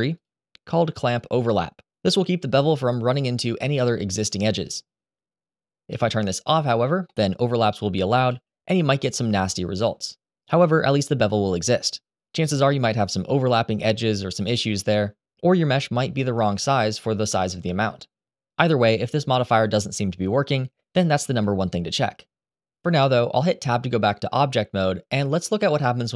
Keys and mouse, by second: 6.1 click, 6.8 middle click, 8.0 g, 10.4 Escape, 20.9 ctrl+z, 23.5 Tab.